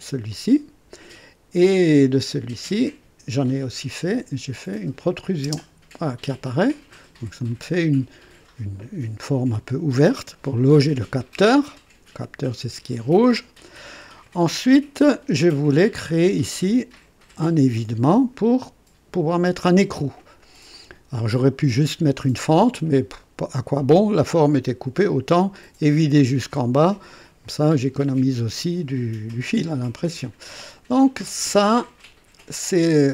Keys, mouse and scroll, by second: 0.3 click, 5.0 click, 5.4 space, 6.4 click, 7.4 click, 11.5-12.2 drag, 13.4 click, 14.2 right click, 20.7-21.4 drag, 26.8-29.5 drag.